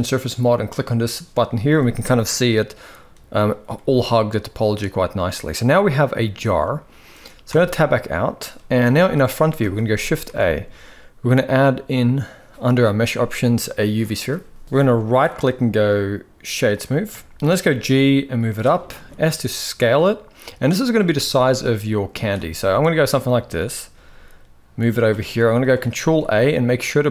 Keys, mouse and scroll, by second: 0.5 click, 1.3-3.1 middle drag, 3.5-4.6 middle drag, 5.3-6.5 middle drag, 7.3 Tab, 7.7-8.0 middle drag, 8.5 KP_1, 9.1 shift+middle drag, 10.0 shift+a, 14.9-16.5 right drag, 16.9 shift+middle drag, 17.6 g, 18.7 s, 20.9 shift+middle click, 21.5 s, 22.2-22.5 shift+middle drag, 23.0-23.3 shift+middle drag, 24.0 g, 25.1 s, 25.6 ctrl+a.